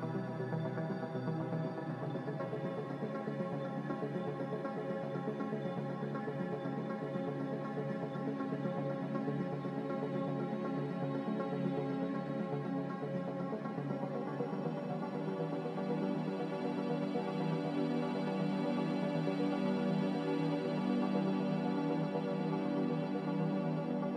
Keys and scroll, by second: 0.0-1.5 typing, 10.9 s.